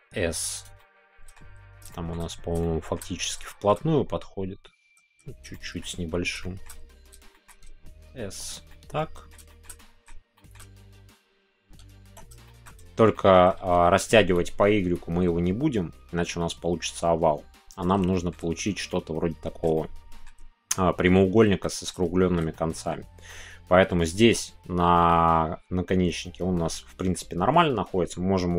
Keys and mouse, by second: 0.7 middle click, 2.0 middle click, 2.0 shift+s, 2.6 middle click, 3.4 shift+middle click, 5.5 shift+middle click, 6.4 shift+middle click, 7.3 shift+middle click, 8.4 click, 8.7-9.3 middle drag, 9.5 shift+middle click, 9.8 middle click, 10.3 shift+middle click, 12.0 Tab, 12.5 shift+middle click, 13.1 middle click, 13.6 Tab, 17.7 right click, 17.7 y, 18.1 shift+middle click, 18.9 middle click, 19.7-20.2 shift+middle drag, 21.6 shift+middle click, 22.0 middle click, 22.5-22.9 shift+middle drag, 23.3 middle click, 24.9-27.1 middle drag.